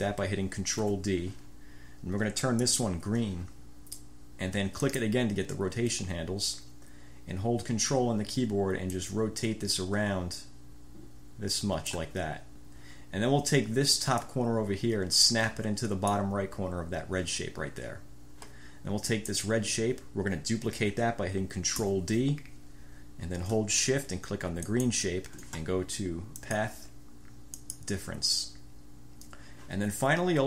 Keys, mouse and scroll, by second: 1.0 ctrl+d, 2.8 click, 5.0 click, 9.1-12.3 ctrl+drag, 14.3-16.5 drag, 19.2 click, 21.9 ctrl+d, 24.7 shift+click, 26.5 click, 27.7 click.